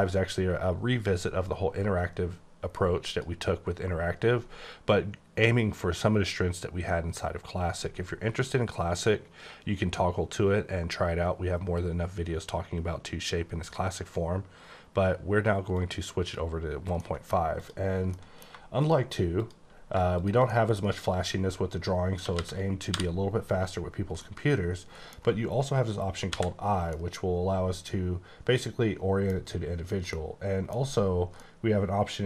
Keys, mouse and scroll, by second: 3.1 click, 15.8 click, 17.0 middle click, 17.6 click, 18.0 middle click, 18.8 shift+click, 19.4 shift+click, 20.5 middle click, 22.2-22.9 typing, 24.2 middle click, 26.3 i, 26.9 middle click, 30.1 middle click, 31.3 middle click.